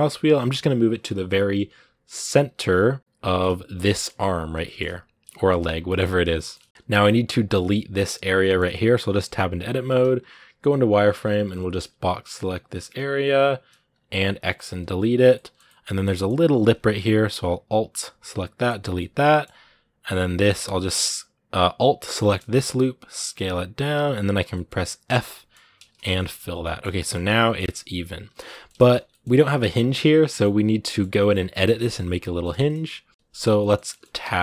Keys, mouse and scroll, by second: 3.5 scroll down 2, 3.7-5.4 shift+middle drag, 5.4-6.1 scroll up 4, 5.7 shift+middle click, 6.1-7.2 shift+middle drag, 7.2-8.2 right drag, 8.2 shift+middle click, 8.4-9.8 scroll up 2, 8.6 Tab, 9.8 z, 15.1 middle click, 15.6 scroll up 2, 15.9 middle click, 16.8-18.6 alt+right drag, 18.6 x, 18.8-20.1 middle drag, 20.1-23.0 alt+right drag, 23.0 s, 24.2 scroll down 2, 24.3 middle click, 24.9 f, 25.0 middle click, 25.3 scroll up 2, 25.8 Tab, 26.0 middle click, 26.3 scroll down 2, 26.4 middle click, 26.9 scroll down 1, 27.0-28.8 middle drag, 28.8 scroll up 1, 28.9-34.0 middle drag, 34.0 Tab, 34.3-34.4 shift+middle drag.